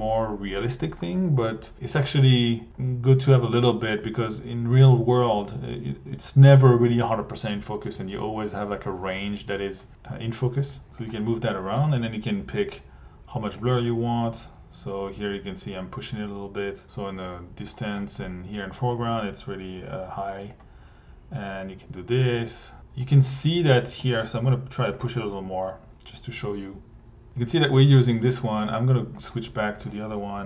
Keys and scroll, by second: 27.7 1, 30.3 Delete.